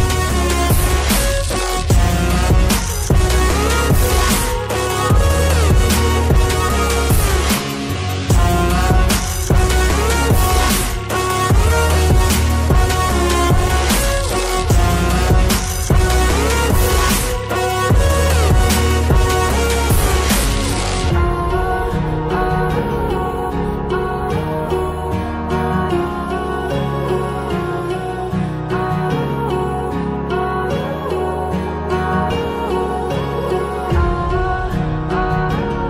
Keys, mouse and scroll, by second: 1.1 click, 6.2 click, 6.5 double click, 9.6 click, 13.5-14.4 scroll down 1, 14.4 click, 15.6 ctrl+c, 15.8 ctrl+v, 20.0 click, 21.4 scroll up 1, 21.8 click, 23.1 click, 24.0 double click, 26.9-27.9 scroll up 1, 27.9 click, 29.3 click, 30.0 click, 30.2 ctrl+z, 30.6 ctrl+z, 30.9-32.0 scroll down 1, 32.1 click, 33.5-34.7 scroll up 1, 34.8 click.